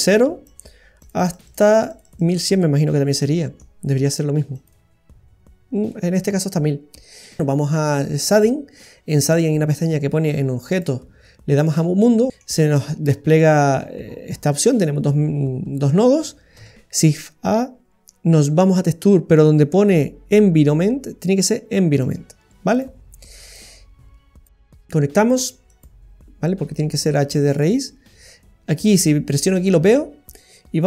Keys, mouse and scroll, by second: 0.4-1.8 click, 1.2 click, 2.6 click, 2.6 middle click, 3.5 middle click, 4.5 click, 5.9 middle click, 8.3 click, 10.7 click, 12.3 middle click, 12.3 scroll down 10, 12.6-13.4 scroll up 12, 13.4 middle click, 13.8-14.5 scroll up 7, 14.5 middle click, 16.5 shift+a, 23.5 click, 25.6 click, 26.0 click, 27.5 click, 29.4 click.